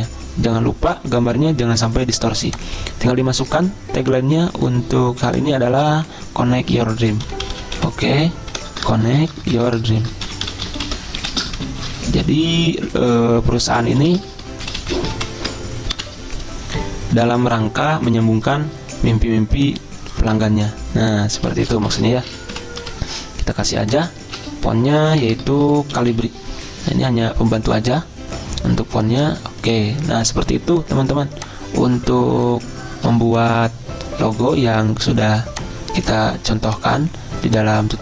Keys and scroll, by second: 6.8-10.5 typing, 9.5 Caps_Lock, 12.2 typing, 13.8-15.7 typing, 16.0 F10, 16.1 F10, 21.6-22.6 typing, 22.9 Escape, 24.2-28.1 typing.